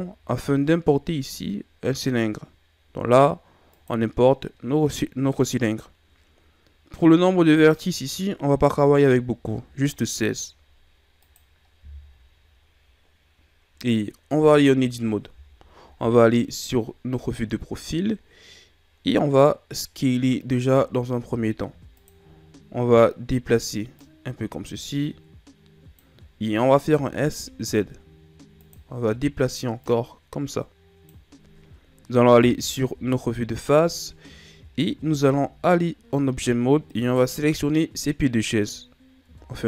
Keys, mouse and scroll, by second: 7.4 click, 14.3 Tab, 15.8 KP_3, 17.0-18.0 ctrl+scroll up 3, 18.0-18.9 scroll up 3, 20.6 s, 23.9 click, 26.8 s, 29.7 click, 32.3 KP_1, 34.3-34.9 shift+scroll down 4, 34.9 Tab, 36.8 right click, 39.1 Tab.